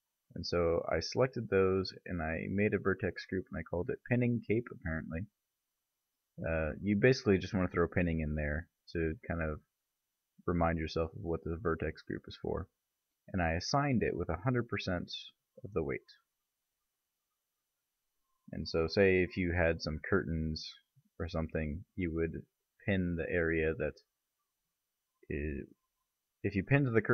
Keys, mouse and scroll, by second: 17.5 KP_Divide.